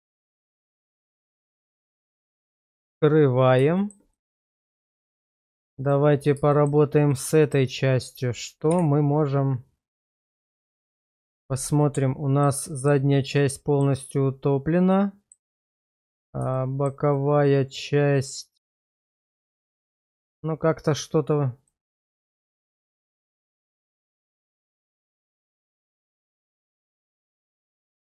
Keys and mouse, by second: 2.6 click, 3.7 shift+middle click, 4.1 middle click, 4.8 shift+middle click, 5.2 middle click, 6.5 shift+middle click, 7.1 middle click, 8.7 /, 10.7 /, 11.8-12.4 middle drag, 12.4 right click, 12.7 middle drag, 14.0-15.3 middle drag, 15.8 shift+middle click, 16.5-16.9 shift+middle drag, 17.1-20.3 middle drag, 21.7-22.0 middle drag, 22.2 shift+middle drag, 23.5-25.7 middle drag, 25.8 shift+middle drag, 26.4-28.1 middle drag.